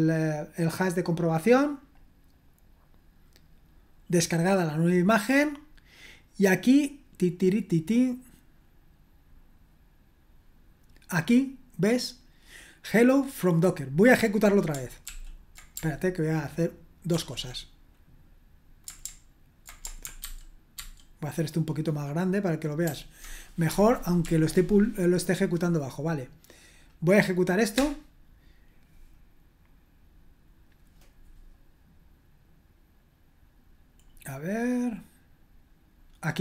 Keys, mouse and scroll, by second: 2.1-2.9 scroll down 2, 2.9-4.3 scroll down 1, 4.3-5.8 drag, 5.8-11.2 scroll down 2, 11.2 click, 11.9 click, 12.5-13.7 drag, 14.1 click, 15.1 ctrl+p, 17.1 ctrl+l, 20.3 ctrl+alt++, 20.8 ctrl+alt++, 22.9 ctrl+alt++, 27.7 Return, 34.0-36.4 scroll up 1.